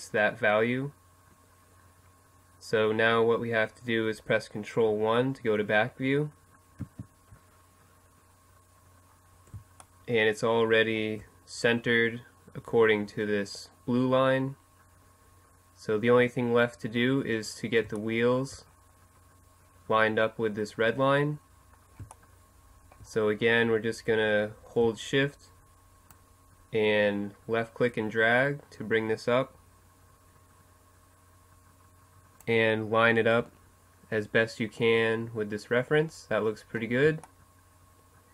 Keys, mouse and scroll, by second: 4.6 ctrl+KP_1, 6.7-8.4 middle drag, 8.6 middle click, 15.9 middle click, 19.5 middle click, 20.1 middle click, 23.9-25.0 drag, 25.0 middle click, 25.1 click, 35.0-36.0 middle drag, 36.0 right click, 36.1 middle click, 36.9-38.3 middle drag.